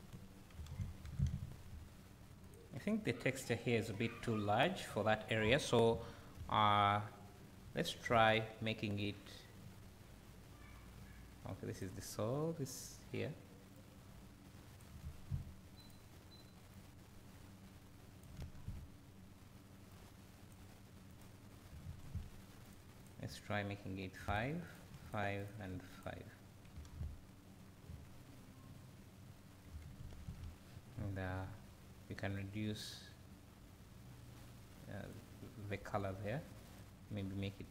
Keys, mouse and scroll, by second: 1.1 alt+a, 2.0 scroll up 1, 9.6-12.8 drag, 13.9-15.9 drag, 16.9-21.2 drag, 19.3 ctrl+z, 22.7 ctrl+z, 23.0-24.4 drag, 25.1 click, 25.4 click, 27.7 scroll down 1, 27.9 `, 30.3 alt+a, 32.5-37.7 drag.